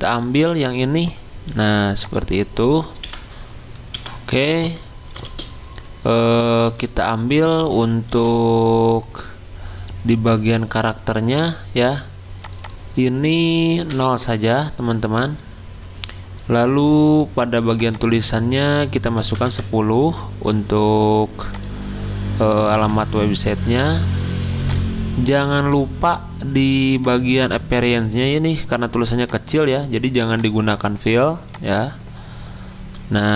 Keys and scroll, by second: 1.5 t, 3.0 Delete, 3.9 Delete, 6.7 ctrl+a, 8.1 ctrl+t, 13.9 0, 14.2 Return, 18.9-19.8 typing.